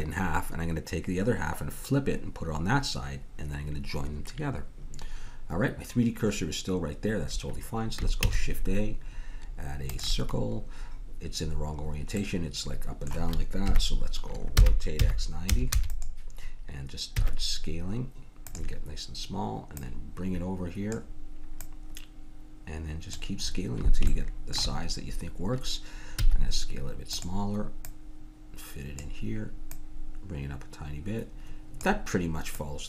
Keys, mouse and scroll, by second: 8.2 shift+a, 11.6-12.9 middle drag, 13.7 KP_1, 14.6 r, 17.2 s, 19.8-21.5 drag, 21.6-23.4 drag, 26.2 s, 27.9-31.6 drag, 32.5-32.8 drag.